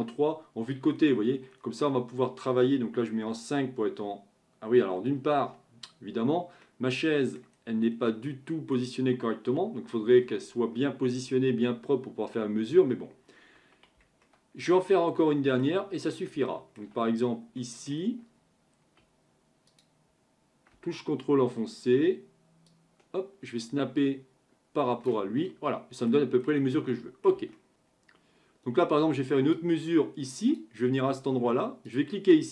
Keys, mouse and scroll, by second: 0.9-1.9 scroll down 6, 1.9-2.3 scroll up 2, 3.2 KP_5, 5.2 KP_5, 6.6-7.8 middle drag, 7.8-8.3 scroll down 2, 8.3-11.4 middle drag, 14.2-16.0 shift+middle drag, 16.0-16.5 scroll up 4, 16.5-17.1 shift+middle drag, 17.1-17.6 scroll up 3, 17.6-19.7 middle drag, 19.7-25.5 drag, 25.5-26.4 middle drag, 26.4-26.9 scroll down 4, 26.9-27.7 middle drag, 27.7 Delete, 29.6 click, 31.9-32.5 drag.